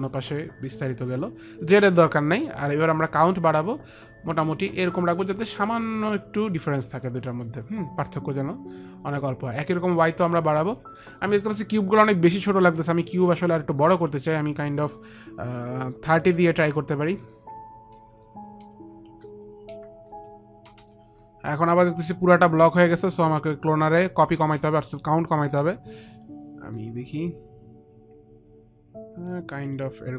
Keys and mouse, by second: 3.7 click, 9.1 click, 13.0 click, 14.9 click, 16.5 click, 16.5 KP_3, 17.0 KP_0, 18.3 Tab, 18.3 click, 18.3 KP_0, 18.3 KP_3, 19.4 Tab, 19.4 KP_3, 19.4 KP_0, 24.5 Return, 24.5 click, 24.5 KP_0, 26.5 click, 27.7 click.